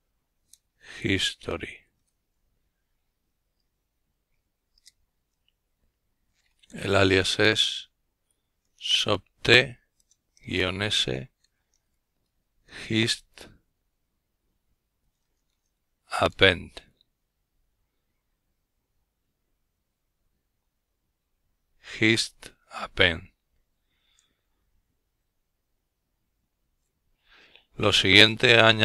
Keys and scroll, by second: 0.0-0.2 typing, 2.5 Return, 4.1-4.9 typing, 6.1-10.8 typing, 12.1-14.4 typing.